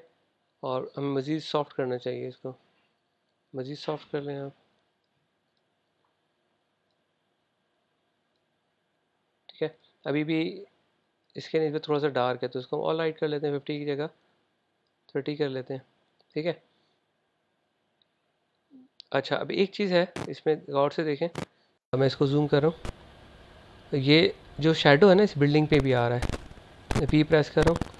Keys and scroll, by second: 1.5 super+z.